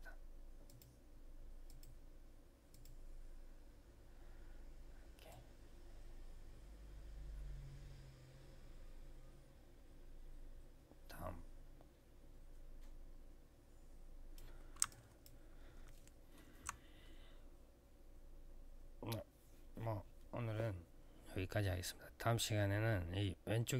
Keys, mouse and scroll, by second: 0.4 click, 1.4 click, 2.5 click, 2.6 click, 5.0 click, 14.6 alt+click, 15.0 click, 15.7 alt+middle click.